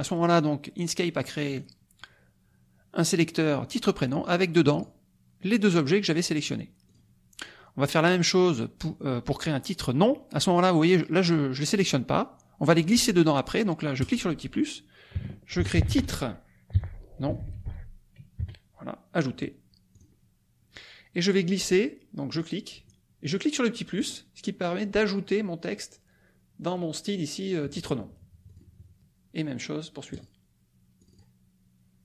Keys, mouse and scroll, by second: 1.5 click, 4.6 click, 5.4 click, 6.0 click, 6.4 click, 6.8 click, 11.2 click, 11.9 click, 14.0 click, 15.3-18.3 typing, 19.9 click, 22.3 click, 24.0 click, 28.4 click, 30.1 click, 31.0 click.